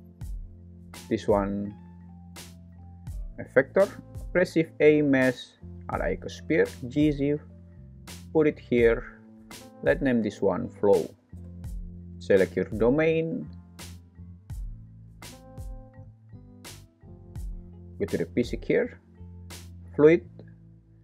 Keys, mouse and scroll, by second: 0.6 click, 0.8 click, 1.4 click, 2.3 F2, 4.2 shift+a, 6.7 g, 6.9 z, 8.3 click, 10.0 F2, 19.8 click, 20.8-21.0 drag.